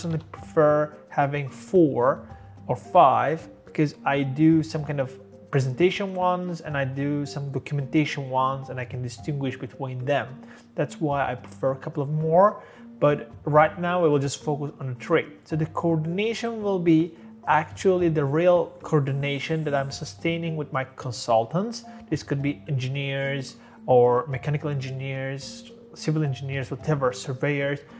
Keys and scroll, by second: 0.0-0.4 typing, 1.8 typing.